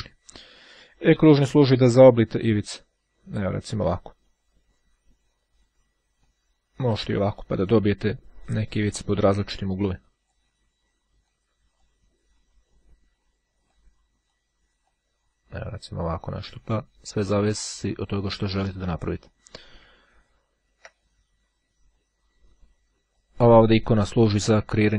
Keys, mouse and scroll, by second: 1.4-4.9 drag, 6.2-10.9 drag, 11.3-12.4 drag, 13.7-14.9 drag, 15.2-17.5 drag, 18.6 click, 20.1-20.6 ctrl+scroll down 1, 20.6 ctrl+scroll down 1, 22.7-23.8 drag.